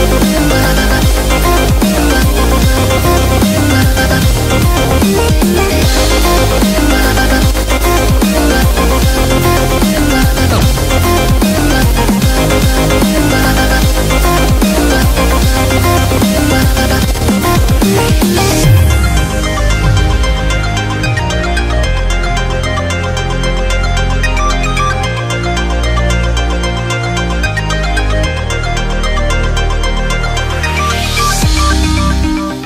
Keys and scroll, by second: 26.2 e.